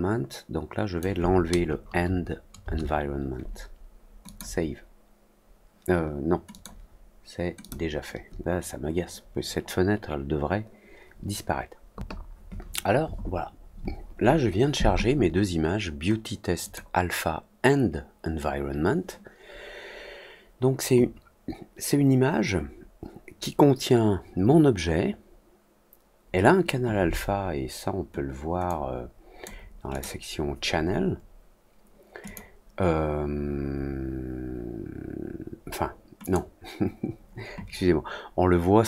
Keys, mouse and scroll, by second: 4.2 click, 6.4 click, 7.5 click, 16.5 click, 28.6 click, 29.8 click, 32.2 click, 36.1 click.